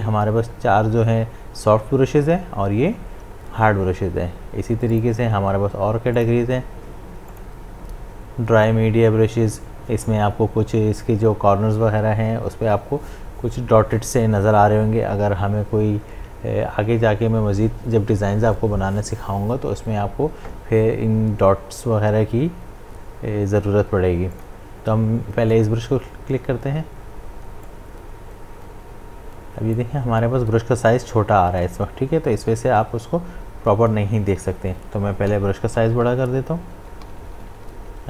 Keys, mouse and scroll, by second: 4.9 click, 24.3 click, 27.6-32.1 drag, 34.3 click, 34.4 ctrl+z, 35.3-38.0 typing.